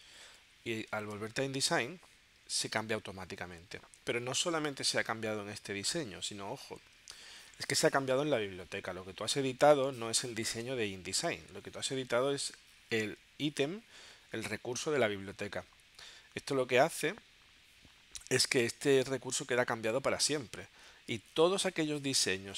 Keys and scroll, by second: 0.3 super+Tab.